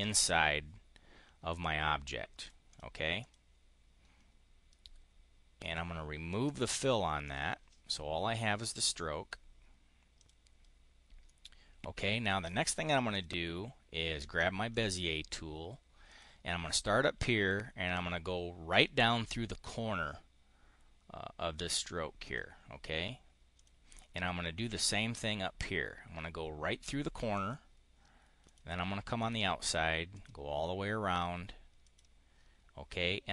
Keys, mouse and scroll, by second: 2.2 click, 2.5 click, 3.0 click, 5.5 click, 6.4 click, 7.1 click, 10.1 click, 11.1-12.5 drag, 13.0 click, 14.6 click, 15.9 click, 22.1 click, 23.4 click, 27.2 click, 28.3 click, 29.0 click, 30.0 click, 31.6 click.